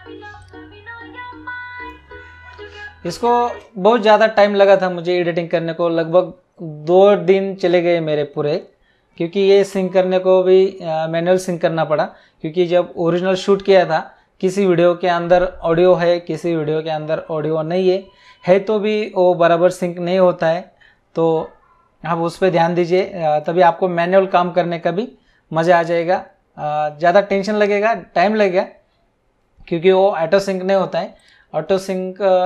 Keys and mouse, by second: 0.4 click, 3.4 space, 22.9 click, 31.1 click.